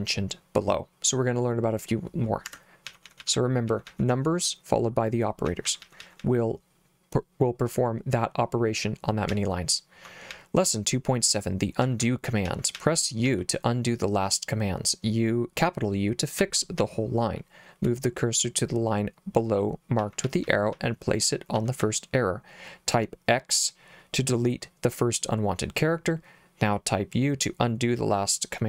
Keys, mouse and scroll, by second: 2.5 Escape, 2.9-4.4 typing, 5.5-6.5 typing, 9.3 j, 10.3 j, 11.9-13.3 typing, 16.4 j, 16.8 k, 20.1-21.8 typing.